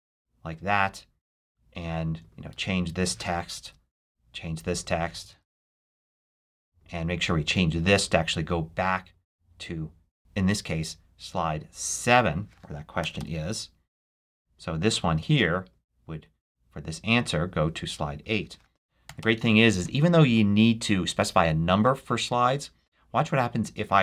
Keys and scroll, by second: 3.4 shift+super+a, 3.7 shift+/, 5.2 super+a, 5.5 shift+super+/, 6.3 shift+/, 12.9 7, 13.0 Return, 18.9 8, 19.0 Return.